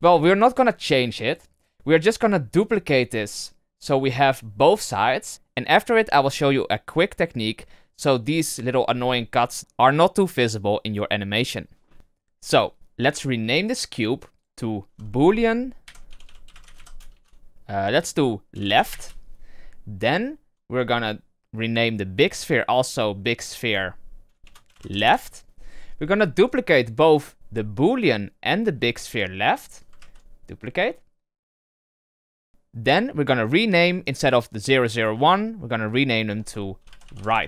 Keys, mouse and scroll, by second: 2.5 right click, 8.6-9.6 scroll up 6, 13.9 click, 14.3 click, 14.5-16.2 drag, 16.2 o, 19.8-20.1 scroll down 1, 20.1-22.2 shift+middle drag, 22.2 click, 22.4-25.5 drag, 26.3 click, 28.4 click, 29.0 shift+click, 31.6 shift+d, 34.8-37.4 drag.